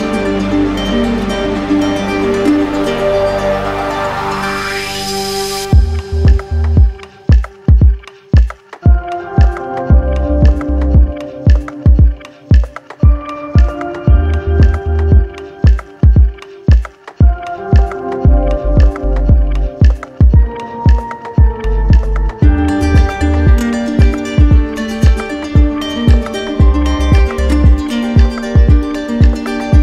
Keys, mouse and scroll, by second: 2.3 click, 4.8-5.9 drag, 14.6-15.7 drag, 17.4-18.5 drag, 20.5 click, 20.6 ctrl+z, 23.4 click, 25.9 click, 28.0 click, 28.5 ctrl+z.